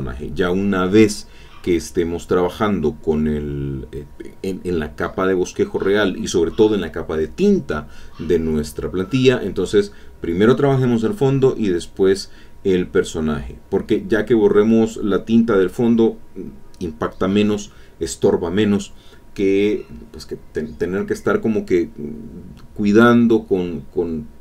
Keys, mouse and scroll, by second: 0.9-2.9 drag, 4.7 click, 5.7 click, 6.2-10.0 drag, 10.8 middle click, 11.6 click, 13.5 click, 16.3-18.0 drag, 19.3-21.3 drag, 23.3 click.